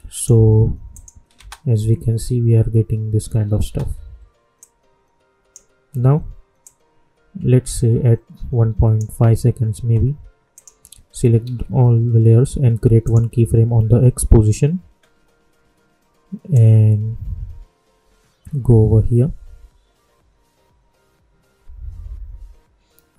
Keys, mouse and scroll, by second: 1.3 space, 3.5 space, 4.5-10.5 drag, 11.4 ctrl+a, 13.0 click, 13.0 click, 16.8-23.1 drag.